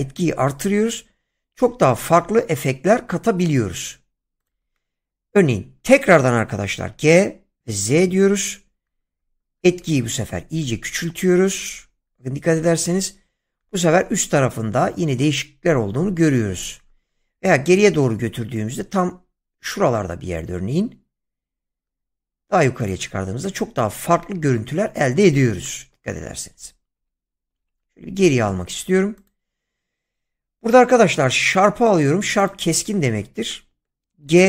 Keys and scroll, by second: 6.8 g, 7.8 z, 26.6 ctrl+z, 34.3 g.